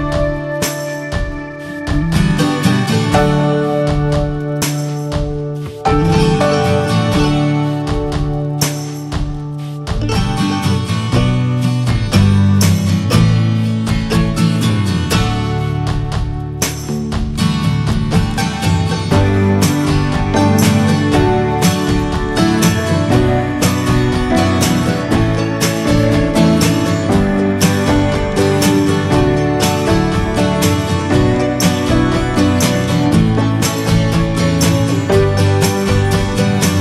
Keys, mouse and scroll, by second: 0.3 Tab, 0.6 shift+middle click, 0.7 scroll up 3, 1.0-2.0 middle drag, 2.0 3, 2.2 click, 2.6 alt+shift+click, 3.4 shift+middle click, 4.0 click, 6.3-6.6 scroll down 7, 6.8-7.3 scroll up 1, 7.3 click, 8.3-9.2 scroll up 6, 8.6 middle click, 9.0 shift+middle click, 9.8 alt+shift+click, 10.6 shift+middle click, 11.4 click, 11.9 alt+shift+click, 12.3 middle click, 12.6 e, 12.9 alt+s, 14.6 scroll down 2, 14.8-16.0 middle drag, 16.0 2, 17.2 2, 17.3 click, 17.8 alt+shift+click, 18.2 middle click, 18.6 ctrl+b, 21.0 scroll down 1, 21.2 middle click, 22.1-22.6 scroll up 3, 22.3 shift+middle click, 24.4-25.6 middle drag, 25.6-28.8 drag, 28.8 Tab, 28.9 drag, 29.1-29.5 scroll down 2, 29.5-30.3 shift+middle drag, 30.3 alt+scroll up 1, 30.5 click, 30.8 ctrl+a, 31.1 click, 31.4-32.0 shift+middle drag, 32.0 ctrl+s, 32.4 shift+middle drag, 32.5 scroll up 1, 32.8-33.9 alt+middle drag, 33.9 scroll up 2, 34.3 shift+middle click, 34.6 Tab, 34.8-35.3 scroll up 2, 35.3 click, 35.6 alt+shift+click, 36.2 s.